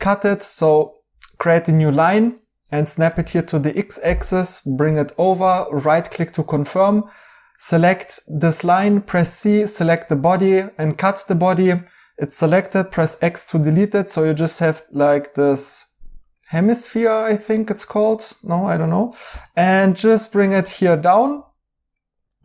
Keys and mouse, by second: 5.2 right click, 12.9 x, 14.4 right click, 17.9 right click.